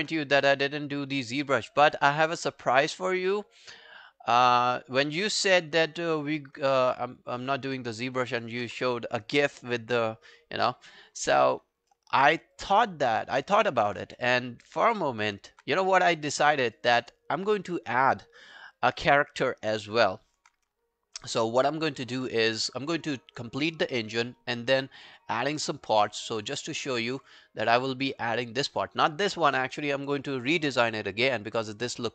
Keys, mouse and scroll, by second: 8.0 alt+middle click, 8.3 alt+right click, 11.9 alt+middle click, 12.3 alt+scroll down 1, 12.6 alt+click, 13.0 alt+scroll down 1, 13.2 alt+middle click, 13.7-14.1 alt+scroll down 1, 14.3 w, 14.9 alt+right click, 15.2 alt+click, 16.1 right click, 17.7 alt+click, 18.1-18.4 alt+scroll down 4, 18.4 alt+middle click, 19.0 alt+scroll down 1, 19.0 alt+click, 19.4 alt+middle click, 19.7 alt+right click, 20.0 alt+click, 24.7-25.7 scroll down 1, 25.9 right click, 26.7 scroll up 3, 27.0 middle click, 27.4-29.3 scroll up 1.